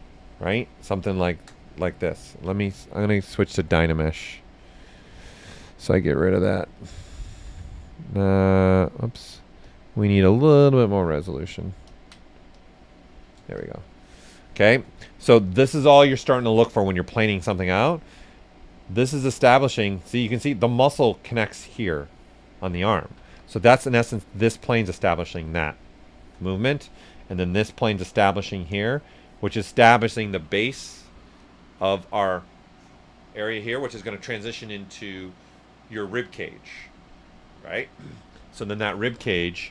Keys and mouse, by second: 7.4 ctrl+z, 8.5-11.0 drag, 12.5 click, 13.5-16.2 shift+drag, 16.0-16.9 typing, 17.1-22.8 drag, 22.7-23.2 typing, 22.8 ctrl+z, 23.3 click, 24.3 click, 25.3-27.5 shift+drag, 26.6 right click, 28.8 shift+click, 29.2 typing, 29.6 right click, 39.2-39.7 typing, 39.4 click.